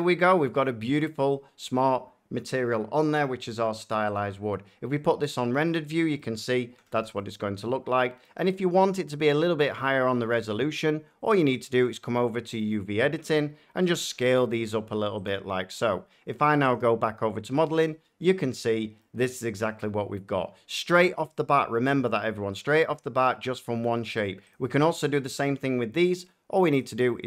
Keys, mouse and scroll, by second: 0.6 middle click, 4.1 click, 5.5-6.1 drag, 6.1-8.0 middle drag, 6.7-7.9 typing, 8.0-8.3 scroll, 10.0 Tab, 11.3 click, 13.9 s, 15.2 click, 16.7 click, 17.3 Tab, 18.9 middle click, 19.7 middle click, 22.0 shift+middle click, 22.6 middle click, 23.1 middle click, 23.1 shift+scroll down 1, 23.9 shift+middle click, 24.5 click, 26.7 click.